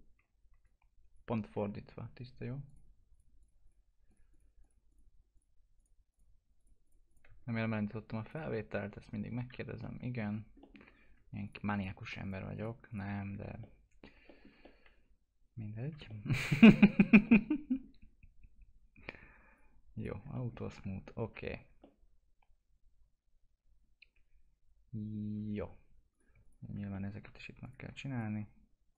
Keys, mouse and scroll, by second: 0.6-2.7 alt+drag, 9.8 alt+middle click, 10.9 scroll up 1, 11.4 ctrl+click, 13.2 scroll down 1, 13.6 alt+middle click, 14.6 middle click, 15.8 scroll down 1, 16.1 alt+middle click, 19.5 click, 20.3 alt+middle click, 20.8 F4, 21.8-25.6 alt+middle drag, 25.6-26.1 scroll up 1, 26.1 click, 26.9 middle click, 27.6 ctrl+click.